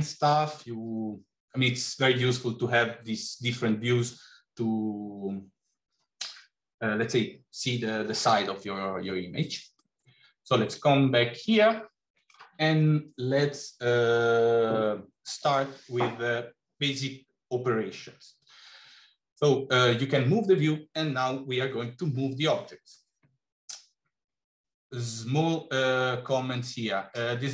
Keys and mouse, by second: 9.7-12.3 middle drag.